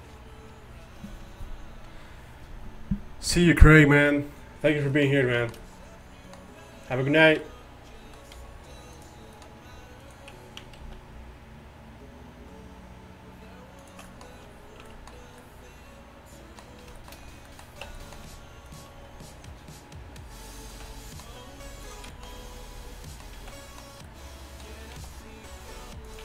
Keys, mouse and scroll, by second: 4.9-6.1 middle drag, 7.2-9.0 drag, 9.4 click, 10.8 alt+s, 14.9 Tab, 17.9 Tab, 18.7-20.7 right drag, 19.7 alt+s, 23.5 z, 26.1 g.